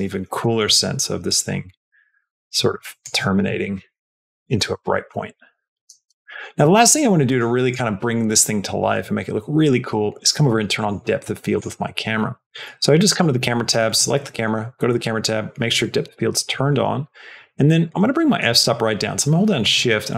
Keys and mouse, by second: 0.4 middle click, 1.1-2.9 drag, 3.2 space, 6.0 space, 6.8 click, 7.2 click, 10.6 click, 11.4 click, 17.8-20.1 shift+drag.